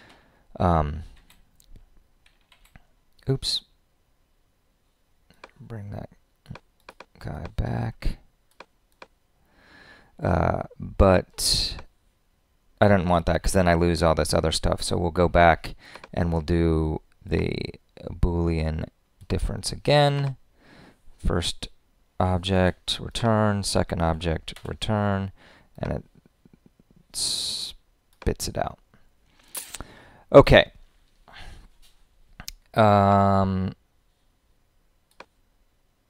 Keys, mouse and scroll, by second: 22.5 Return.